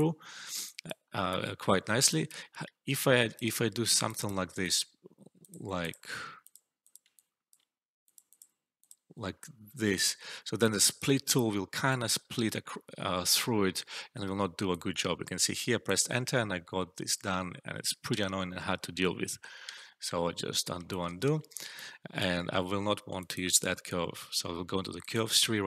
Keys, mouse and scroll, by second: 0.9 alt+middle click, 1.2-2.1 alt+drag, 3.9 typing, 7.1-7.7 alt+click, 10.5-11.1 alt+drag, 12.3 Return, 14.6-15.8 alt+drag, 18.0 ctrl+z, 19.6 ctrl+z, 20.8 alt+click, 21.3 alt+middle click, 21.7-22.3 alt+drag.